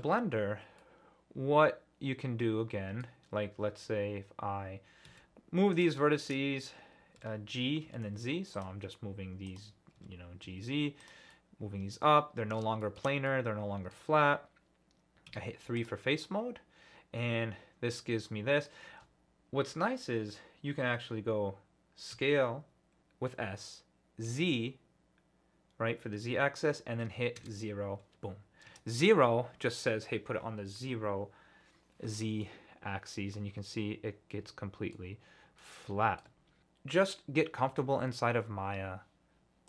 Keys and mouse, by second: 0.0 alt+middle click, 0.9 middle drag, 1.2 middle click, 1.7-3.0 middle drag, 5.1 1, 5.7 click, 7.2 g, 7.8 z, 8.5 click, 9.5 click, 10.0 g, 10.4 z, 11.0 click, 11.3-12.6 middle drag, 12.8 shift+middle click, 13.3 click, 15.3 3, 15.8 click, 16.2 click, 18.4 middle click, 22.1 s, 24.3 z, 27.4 KP_0, 28.7 KP_Enter, 32.4 middle click, 34.4 alt+click, 34.9 middle click, 35.6 click, 35.7 middle click, 36.0 alt+click.